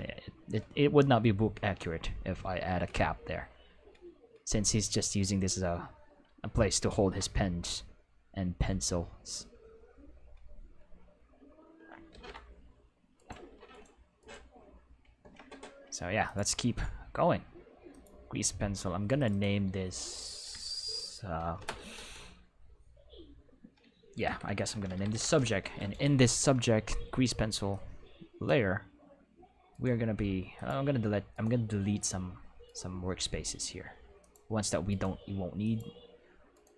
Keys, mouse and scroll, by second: 6.9 ctrl+s, 12.1 ctrl+s, 13.1 right click, 13.7 right click, 14.1 right click, 16.2 click, 17.9 click, 19.1 click, 19.3 click, 24.2-25.1 typing, 25.4 Return, 27.7 click, 29.7 alt+right click, 30.5 alt+click, 31.3 alt+right click, 31.9 alt+click, 32.6 alt+right click, 34.1 click, 34.8 right click, 35.6 click, 36.5 right click.